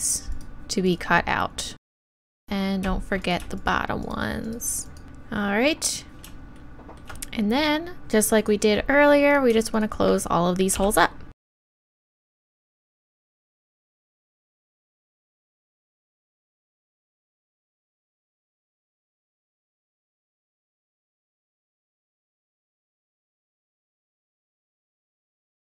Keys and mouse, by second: 3.0 x, 3.6-5.4 right drag, 5.0 x, 5.4 middle click, 5.6-6.9 middle drag, 8.4 click, 11.5 f, 12.3 f, 12.6 f, 12.8 f, 13.5 ctrl+z, 13.6 ctrl+z, 13.9-15.2 typing, 14.3 click, 14.7 click, 14.7 right click, 15.0 right click, 15.6 click, 15.6 right click, 16.1 click, 16.3-25.7 typing.